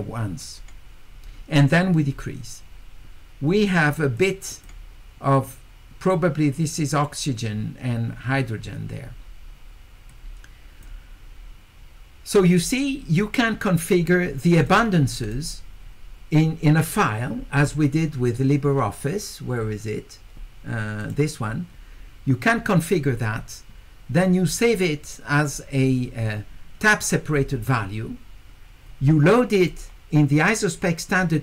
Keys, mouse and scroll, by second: 4.2 click, 10.1 click, 13.2 click, 15.2 click, 21.0 click, 29.6 click.